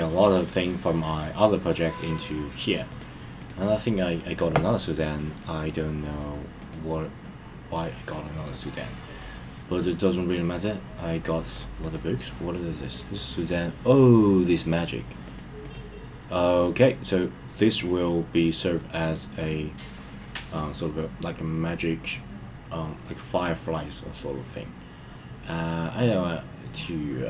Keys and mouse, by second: 0.4 click, 1.3-1.8 middle drag, 3.4 click, 6.6 click, 9.0-11.5 middle drag, 15.2 click, 15.6 click.